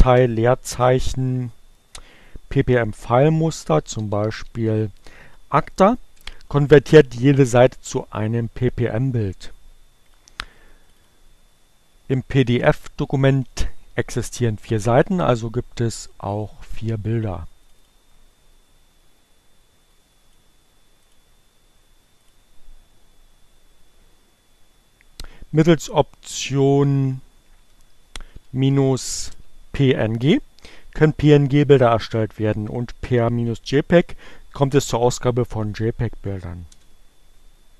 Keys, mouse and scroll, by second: 1.7-2.7 typing, 4.5 Return, 11.8 click, 12.2 click, 14.8-17.4 drag, 18.4 click, 19.9 click, 22.5 click, 23.9 click, 25.6 click, 27.8 Up, 29.1 Left, 30.2-31.9 typing.